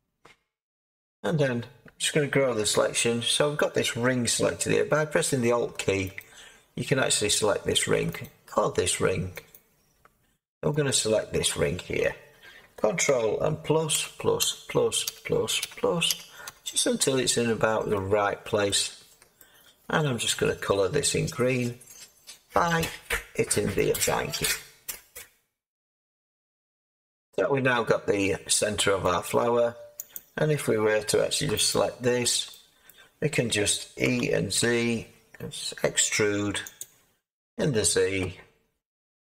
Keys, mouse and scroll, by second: 4.8 click, 6.1 alt+click, 8.3 alt+click, 18.6 middle click, 20.0 middle click, 21.7-23.9 scroll up 8, 23.9 click, 24.7-25.7 drag, 25.7 Tab, 29.0 middle click, 29.1 Tab, 30.1-31.4 drag, 31.6 alt+click, 32.8-36.7 middle drag, 34.0-34.6 typing, 36.7 click, 37.4-39.3 middle drag.